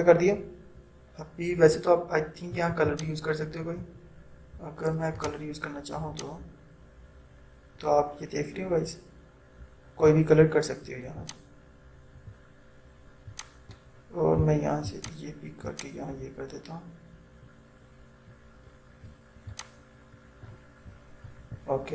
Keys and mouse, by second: 3.0-21.9 drag.